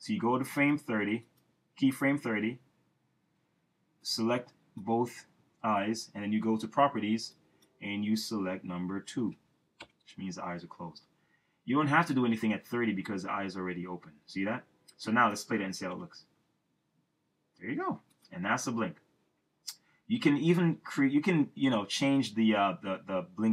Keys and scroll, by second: 9.2 2, 9.8 Return, 15.9 Return.